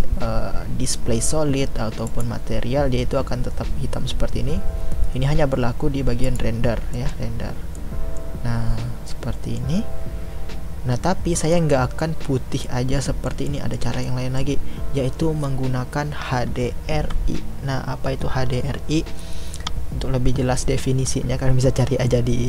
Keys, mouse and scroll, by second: 2.0 click, 6.2 click, 6.9-22.4 middle drag.